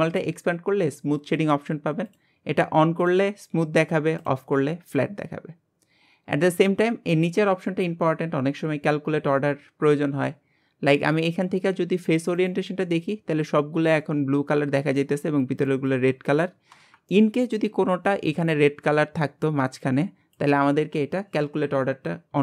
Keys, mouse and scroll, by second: 2.1 click, 3.0 click, 4.2 click, 11.1-12.9 drag, 12.9-16.7 middle drag, 17.1-21.5 middle drag.